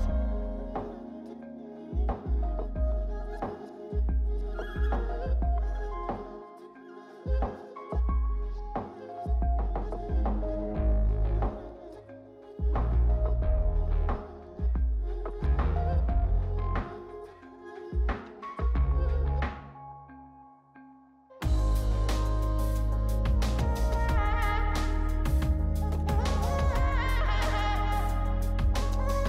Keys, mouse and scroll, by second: 3.2 double click, 18.5 double click, 21.1 scroll up 2, 22.1-22.7 scroll down 1, 22.7-24.7 scroll down 1, 24.7 scroll up 3, 25.4-26.7 scroll down 3.